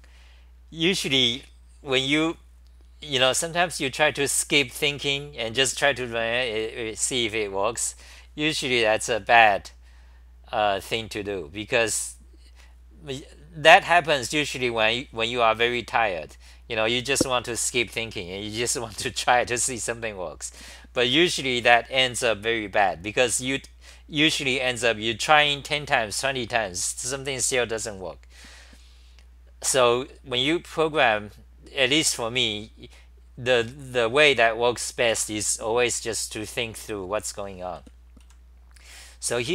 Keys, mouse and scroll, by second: 29.7 c, 31.1 c, 31.9 h, 37.8-39.5 typing.